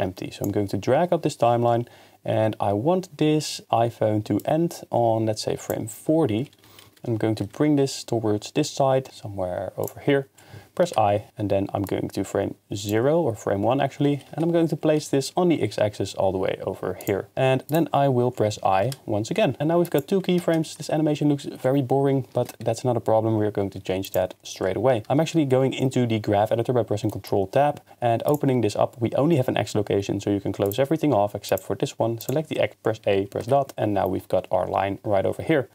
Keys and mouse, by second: 4.4 click, 6.6 g, 6.9 y, 7.4 x, 10.9 i, 14.0 g, 14.3 y, 15.0 x, 17.0 click, 17.7 click, 18.8 i, 19.9 click, 20.4 shift+space, 24.0 click, 25.1 ctrl+Tab, 28.3 click, 30.7 click, 31.5 click, 32.2 click, 33.0 a, 33.4 KP_Decimal.